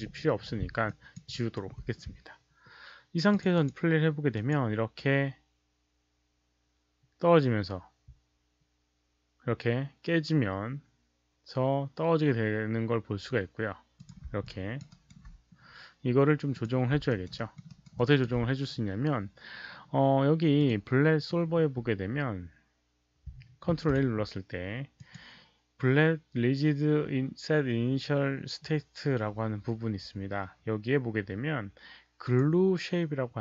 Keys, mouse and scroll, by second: 0.8 alt+click, 1.2 alt+right click, 3.2 alt+click, 3.5 click, 4.3 alt+click, 9.3 click, 10.2 alt+click, 10.2 alt+right click, 11.6 click, 11.6 alt+right click, 13.9 click, 14.4 alt+click, 14.8 alt+right click, 16.5 alt+click, 17.0 alt+right click, 17.3 alt+middle click, 17.6 alt+right click, 17.9 alt+click, 20.5 alt+click, 23.9 ctrl+a, 24.9 alt+click, 26.4 ctrl+a, 26.4 alt+click, 26.4 alt+right click, 26.4 alt+middle click, 27.9 ctrl+a, 27.9 alt+click, 27.9 alt+right click, 27.9 alt+middle click, 28.7 ctrl+a, 28.7 click, 31.4 ctrl+a, 31.4 click, 32.2 click.